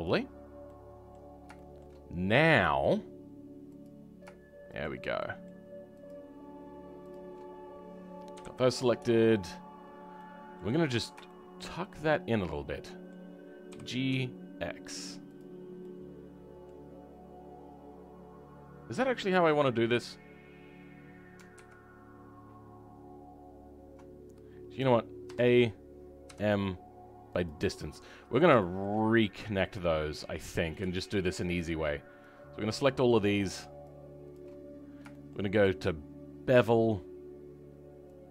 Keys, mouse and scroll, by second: 0.0 right click, 0.6 middle click, 1.0-2.8 middle drag, 2.8-4.7 drag, 5.1 shift+middle click, 6.0 shift+click, 7.0 shift+click, 8.3 KP_3, 8.7-10.0 scroll down 2, 10.1 middle click, 10.7-11.2 scroll up 5, 11.2 shift+middle click, 13.7 g, 15.5 scroll down 1, 15.7 middle click, 17.4-21.5 scroll down 3, 21.5 ctrl+z, 24.1-25.2 scroll down 4, 27.9-28.9 middle drag, 28.9-30.0 scroll up 3, 30.0-30.3 scroll up 1, 30.3 click, 32.8 shift+click, 33.0-34.2 shift+middle drag, 34.2 shift+click, 35.0-36.5 shift+middle drag, 36.5 click.